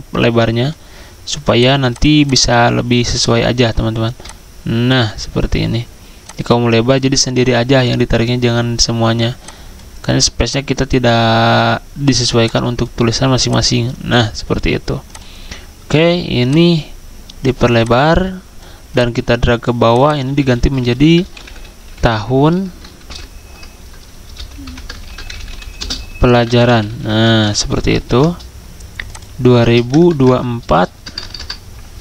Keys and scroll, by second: 20.3 ctrl+a, 21.4-21.7 typing, 23.0 typing, 23.1 ctrl+a, 23.1 ctrl+Caps_Lock, 24.1 Caps_Lock, 25.1-27.2 typing, 28.1 ctrl+a, 30.1-31.0 typing.